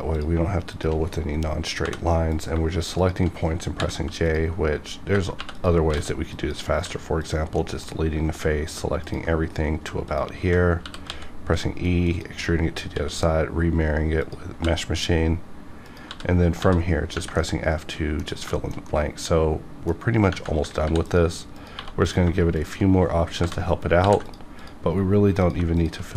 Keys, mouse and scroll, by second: 0.1 click, 0.7 shift+click, 2.3 click, 3.0 shift+click, 3.7 j, 4.2 click, 5.4 3, 5.5 click, 5.9 x, 6.2 click, 6.7 2, 7.2 click, 7.6 middle click, 9.0 ctrl+click, 9.2 ctrl+click, 10.1 shift+click, 10.8 e, 11.1 x, 12.1 click, 12.9 alt+x, 14.2 click, 14.5 f, 15.8 click, 16.1 f, 16.5 f, 17.0 scroll down 1, 17.4 middle click, 18.3 scroll down 1, 18.5 shift+middle click, 18.9 middle click, 20.0 scroll up 1, 20.8 ctrl+r, 21.0 ctrl+click, 21.6 click, 21.8 1, 22.1 click, 22.5 shift+click, 23.3 j, 24.0 ctrl+r, 24.3 ctrl+click, 24.6 click, 25.8 shift+click.